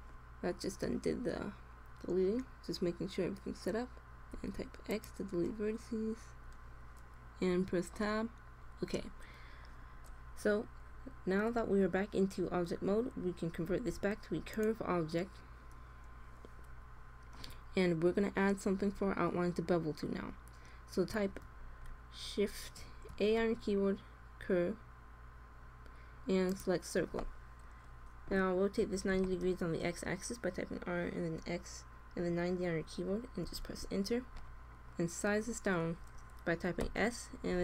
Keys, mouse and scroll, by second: 4.3 x, 7.5 Tab, 8.5-13.5 middle drag, 13.6 alt+c, 18.3-20.9 middle drag, 21.4 middle click, 22.1 click, 23.0 shift+a, 28.7 r, 36.8 s.